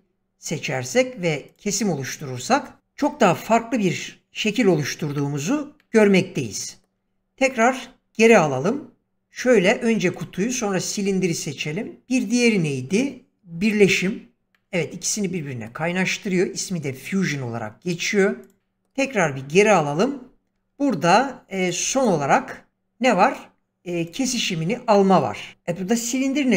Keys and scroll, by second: 7.0 ctrl+z, 18.6 ctrl+z.